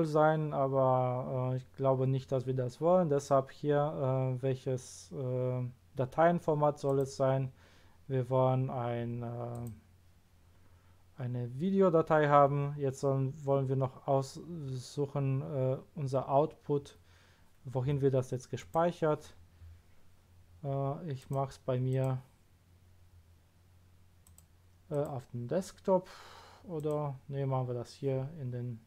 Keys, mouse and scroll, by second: 6.8 click, 9.5 click, 10.6-11.1 scroll down 1, 18.5 click, 21.2 click, 21.9 click, 24.2 click, 24.9 click, 26.7 click.